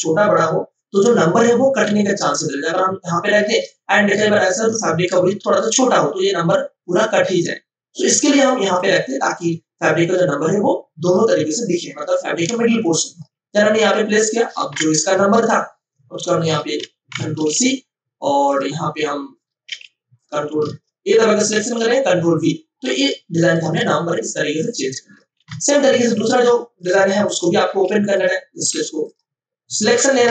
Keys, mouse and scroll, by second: 2.2-13.3 drag, 13.3 space, 13.5 click, 13.8 space, 14.1 ctrl+click, 15.0 ctrl+o, 16.4 click, 16.8 F2, 17.3 ctrl+c, 18.4 click, 19.6 t, 20.2 click, 20.6 ctrl+a, 22.8 click, 23.2 ctrl+space, 23.5 ctrl+click, 23.7 ctrl+space, 24.4 ctrl+space, 25.7 ctrl+alt+click, 27.7 v, 28.1 click, 28.7 w, 29.0 click.